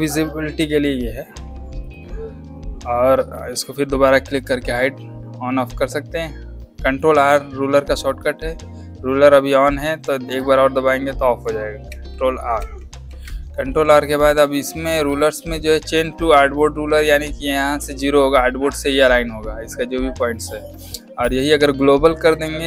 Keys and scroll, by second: 11.8 ctrl+r.